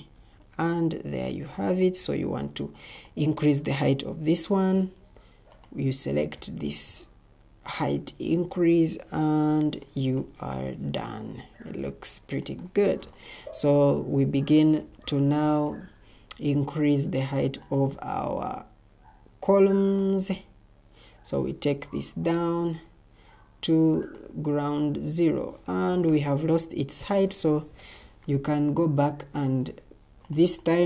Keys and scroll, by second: 1.6 Escape, 14.1 Escape, 14.7 Escape, 27.5 ctrl+t.